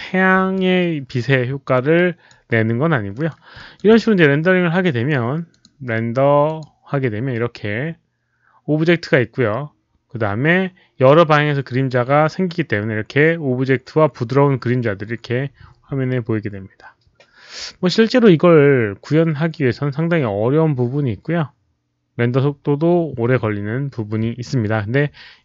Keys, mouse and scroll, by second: 0.5 alt+click, 1.7 alt+click, 2.7-3.1 alt+scroll up 1, 3.1 alt+middle click, 3.5 alt+click, 5.5 alt+click, 6.4 alt+click, 9.2 alt+click, 9.2 alt+middle click, 11.6 alt+click, 11.6 alt+middle click, 13.6 alt+click, 13.6 alt+middle click, 15.7 click.